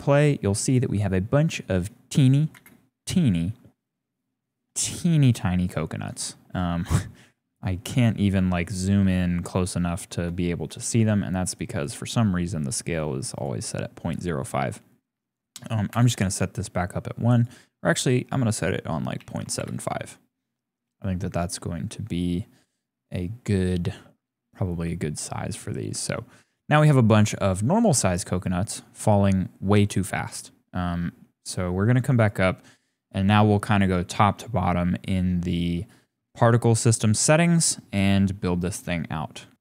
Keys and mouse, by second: 2.5 space, 5.4-5.7 shift+drag, 5.7 shift+middle click, 7.5 shift+middle click, 8.2 click, 9.2 shift+click, 9.6 shift+click, 10.2 click, 10.2 shift+middle click, 10.8 shift+middle click, 11.6 middle click, 12.2 shift+middle click, 13.5-15.9 drag, 17.4-19.6 drag, 27.1 click, 29.9 click, 32.2 click.